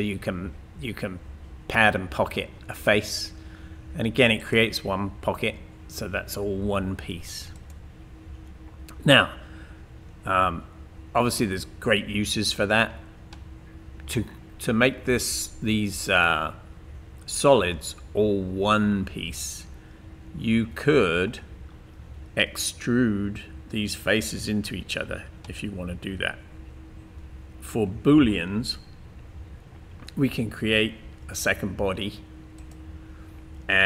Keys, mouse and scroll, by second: 4.4 click, 7.6 click, 10.4-11.1 scroll up 2, 11.1-11.8 scroll down 2, 11.8 scroll down 1.